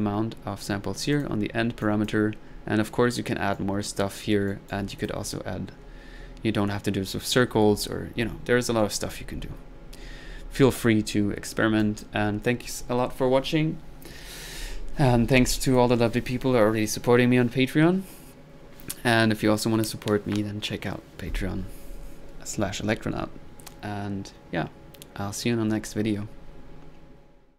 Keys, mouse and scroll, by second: 0.0 click, 0.9 drag, 1.1 click, 1.5 middle click, 2.0 click, 2.5-3.0 middle drag, 3.6-4.3 right drag, 4.5 right click, 5.0 click, 8.5 middle click, 11.8-12.1 drag, 15.7 click, 15.9 click.